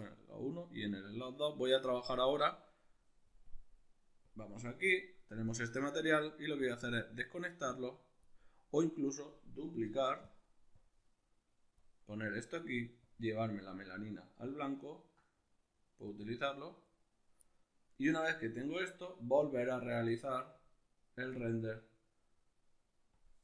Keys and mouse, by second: 0.0-5.3 drag, 5.3-6.6 ctrl+middle drag, 6.6 click, 7.7 click, 9.0 right click, 9.8 shift+d, 10.7 click, 13.0-14.7 drag, 14.7-16.0 ctrl+middle drag, 16.0-23.4 drag.